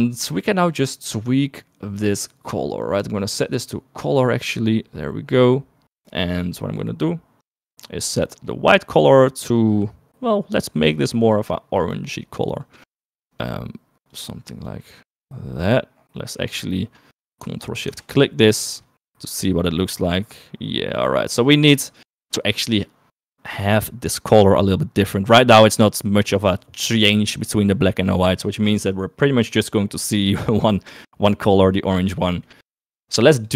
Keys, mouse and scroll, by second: 2.0 middle click, 3.4 click, 6.7 middle click, 7.8 middle click, 9.2 middle click, 10.1 click, 16.9 middle click, 17.2 middle click, 20.1 middle click, 23.1 middle click, 29.2 middle click, 32.5 middle click.